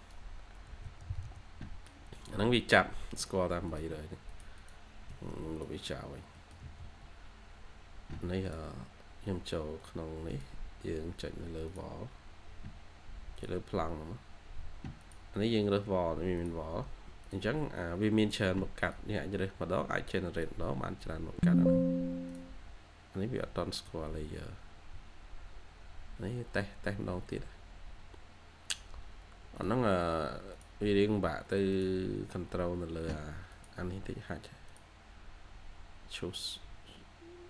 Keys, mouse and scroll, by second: 0.0-1.0 typing, 4.5 double click, 5.0 Escape, 5.2 Escape, 6.2 middle click, 6.5-8.2 typing, 7.0-7.3 scroll down 1, 23.0 scroll down 1, 23.3 middle click, 23.8 scroll down 1, 24.5 scroll up 1.